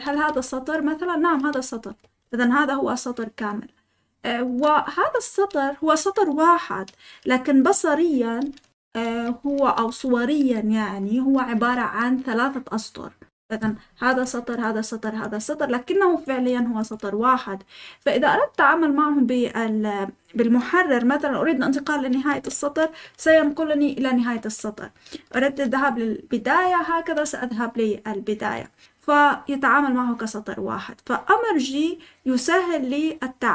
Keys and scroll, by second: 0.0-2.6 typing, 5.0 Escape, 9.0-10.0 typing, 11.2-11.6 typing, 23.2 typing.